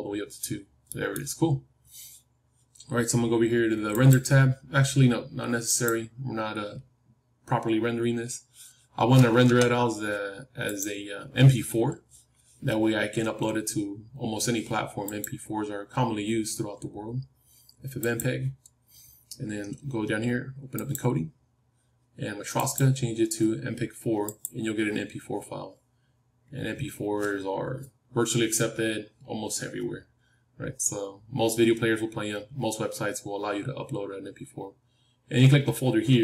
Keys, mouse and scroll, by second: 0.5-3.3 middle drag, 3.8-7.7 drag, 9.4 KP_0, 10.7-14.4 drag.